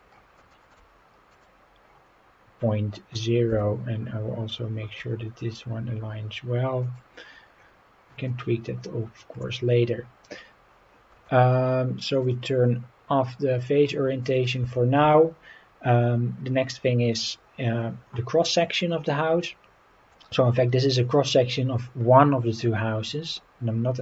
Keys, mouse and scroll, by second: 0.1 scroll down 2, 0.5 shift+middle drag, 1.3 click, 1.8 scroll up 4, 3.5 g, 6.8 click, 7.2-7.8 scroll down 5, 8.3-9.4 middle drag, 9.7-10.5 scroll up 4, 12.2-13.8 drag, 14.2 click, 14.7 shift+middle drag, 15.1-17.2 middle drag, 18.8-20.1 middle drag.